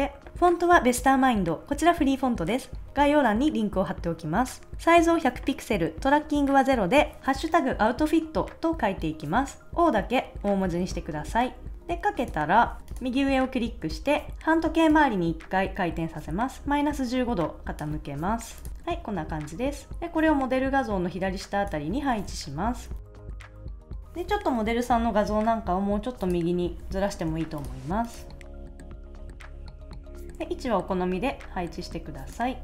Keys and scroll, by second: 18.7 super+s, 22.6 shift+Up, 23.0 shift+Right, 23.1 shift+Down, 23.1 shift+Left, 23.2 shift+Up, 23.3 shift+Right, 23.7 super+s, 28.7 shift+Right, 29.1 super+s.